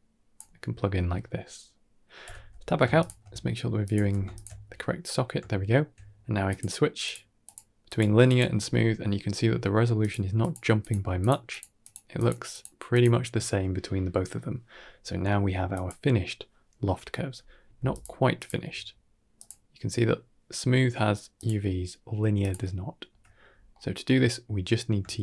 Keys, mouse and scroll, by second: 2.1 Tab, 2.8 ctrl+shift+click, 3.7 click, 3.9 x, 4.2 alt+shift+click, 4.9 middle drag, 5.3 shift+middle drag, 6.3 click, 6.9 click, 7.3 click, 7.7 click, 8.1 click, 9.9 click, 10.3 click, 10.7 click, 11.1 click, 11.7 click, 12.0 click, 12.8 click, 15.6 click, 17.8 ctrl+shift+click, 18.2 ctrl+shift+click, 19.2 click, 21.2 click, 22.3 click, 22.9 Tab, 23.3 scroll down 2, 23.6 middle click, 24.7 middle click, 25.0 shift+a.